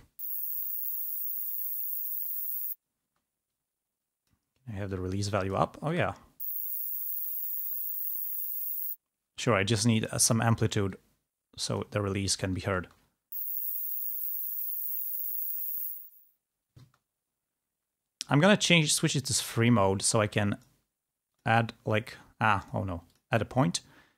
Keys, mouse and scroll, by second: 3.4 space, 3.9 click, 4.9 click, 6.0 space, 9.5 space, 11.2-12.3 drag, 13.0 space, 17.1 space, 19.8-20.8 drag, 22.8 click, 23.8-24.1 drag.